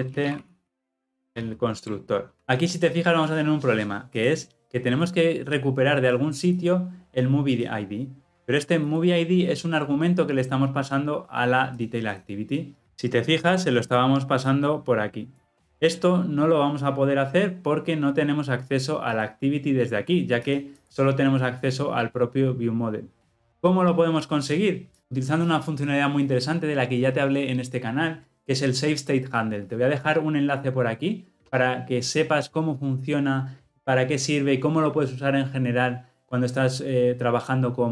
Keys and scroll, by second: 1.8 Return.